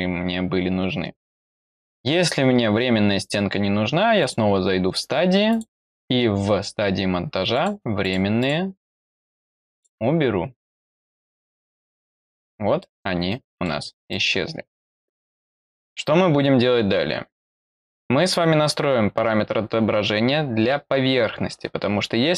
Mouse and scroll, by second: 4.1 click, 5.4 click, 7.4 click, 7.9 click, 8.3 click, 9.6 click, 10.6 click, 11.4 click, 12.7 middle click, 13.5 middle click, 14.1-15.0 scroll down 1, 15.0-22.3 scroll down 1.